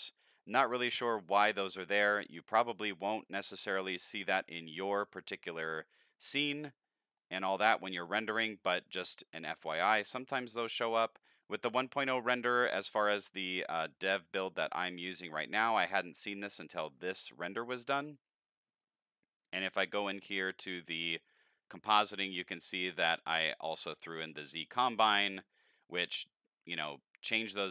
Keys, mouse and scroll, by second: 2.9 middle click, 3.2-7.1 middle drag, 7.5 middle click, 7.8 middle click, 8.0 middle click, 8.3 middle click, 11.1 middle drag, 11.5 middle click, 11.9 middle click, 13.4 middle click, 15.2 middle click, 17.0 middle click, 21.3 click, 22.1 middle click, 22.4 middle click, 22.8 middle click, 23.5-23.9 drag, 24.2 shift+click, 25.1 middle click.